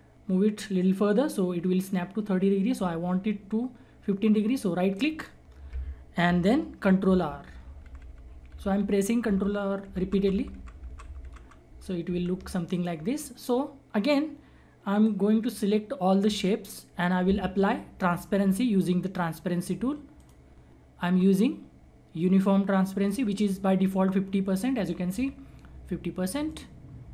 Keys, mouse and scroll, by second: 4.9 ctrl+right click, 7.0 ctrl+r, 12.7 click, 13.1-13.5 scroll down 1, 13.5-13.9 scroll up 1, 13.9-14.9 scroll down 1, 15.0-16.5 drag, 16.5-18.3 scroll up 1, 20.1 click, 23.0 click, 26.4 click, 26.8-27.1 scroll down 1.